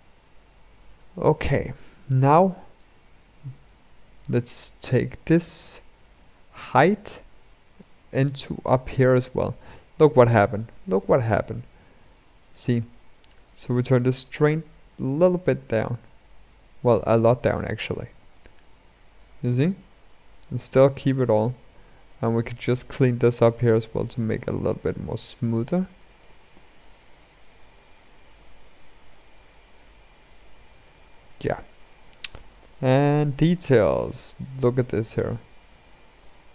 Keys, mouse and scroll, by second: 9.3-10.3 scroll up 6, 10.3-13.1 shift+middle drag, 13.1-16.3 drag, 17.3-21.1 shift+middle drag, 21.1 Tab, 21.4-22.1 scroll up 2, 22.1 shift+middle click, 22.8-23.5 scroll up 3, 23.5 shift+middle click, 24.2 ctrl+r, 26.3 ctrl+r, 27.9 scroll down 3, 28.1 Tab, 28.9-30.7 shift+middle drag, 30.7-31.4 scroll down 3, 31.4-33.6 shift+middle drag, 33.6-35.5 drag, 35.5-35.9 scroll up 2, 35.9-36.5 scroll down 4.